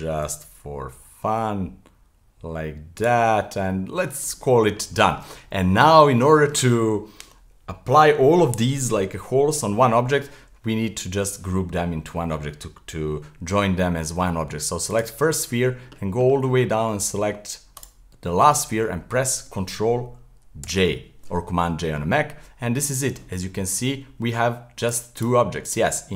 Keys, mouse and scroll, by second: 0.3 g, 3.2-4.2 middle drag, 4.2 scroll down 1, 4.4-9.3 middle drag, 14.9 click, 15.3-17.8 scroll down 50, 17.8 shift+click, 20.6 j, 22.4-23.4 middle drag, 23.4-24.8 scroll up 25, 24.8 click, 25.2 click, 25.7 click.